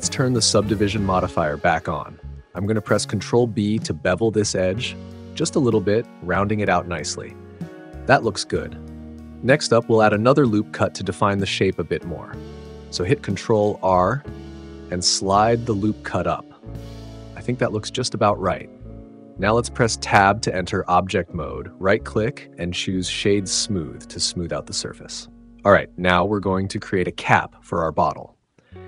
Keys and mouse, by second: 0.6 click, 3.5 ctrl+b, 7.7 click, 12.1 ctrl+r, 12.6 click, 19.2 Tab, 21.8 KP_Decimal, 23.6-24.8 drag, 25.0-28.8 middle drag.